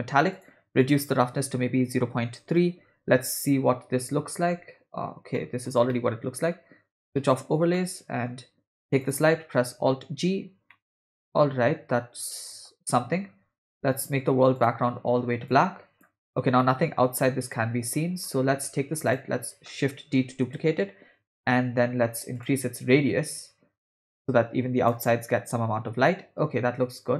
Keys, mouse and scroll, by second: 0.3 click, 1.0-2.5 drag, 5.4 middle click, 5.9 middle click, 7.4 click, 7.7 middle click, 9.0 click, 9.9 alt+g, 10.7-12.7 middle drag, 14.0 click, 14.6 click, 16.6-18.3 middle drag, 19.1 click, 20.3 shift+d, 22.4 click, 23.4-24.9 drag.